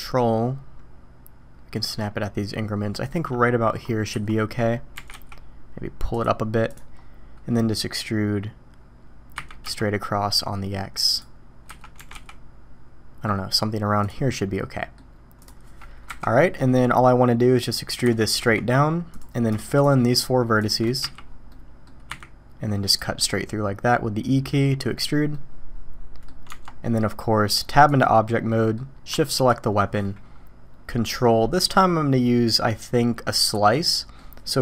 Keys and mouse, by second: 4.1 a, 4.9 g, 9.3 e, 11.6 a, 11.9 g, 14.3-15.0 drag, 15.4 click, 16.1 KP_1, 18.0 e, 20.1 shift+click, 21.0 f, 21.5-21.9 drag, 22.1 e, 23.2-24.5 drag, 25.3-26.2 drag, 26.5 Tab, 28.5 drag, 29.4 shift+middle click, 31.6-34.1 middle drag.